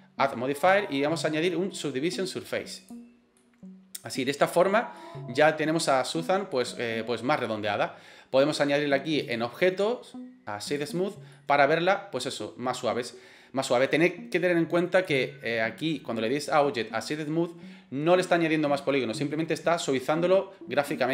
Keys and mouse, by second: 0.6-3.0 drag, 3.5-4.1 middle drag, 5.0-5.5 middle drag, 6.6-7.7 middle drag, 9.3-11.0 drag, 11.4-12.8 middle drag, 15.0-21.1 drag.